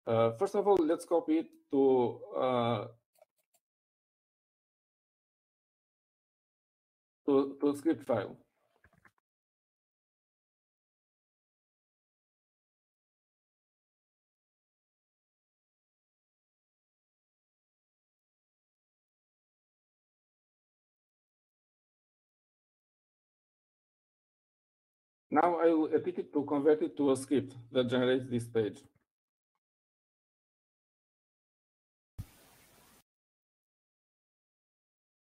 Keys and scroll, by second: 10.2-12.1 typing, 13.2-13.9 typing, 15.4-19.1 typing, 22.2-23.9 typing, 30.6 typing, 32.4-35.3 typing.